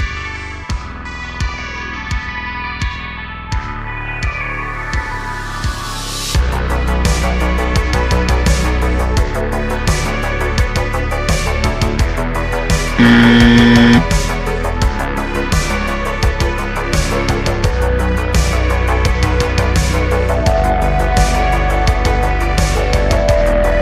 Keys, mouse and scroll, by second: 0.3 scroll down 3, 0.6 s, 2.7 shift+d, 3.1 r, 4.0 g, 4.6-5.0 scroll down 2, 5.1 shift+click, 5.5 shift+middle click, 5.8 shift+d, 6.4 r, 8.4 g, 9.5-9.8 scroll down 1, 9.8 click, 10.8 shift+d, 11.5-12.0 scroll down 2, 12.7 click, 15.7 click, 16.3 shift+a, 17.3 s, 18.4 ctrl+a, 19.0 Tab, 19.7-21.3 right drag, 21.3 Tab, 22.3 Tab, 22.5 right click, 23.0 Tab, 23.5 click.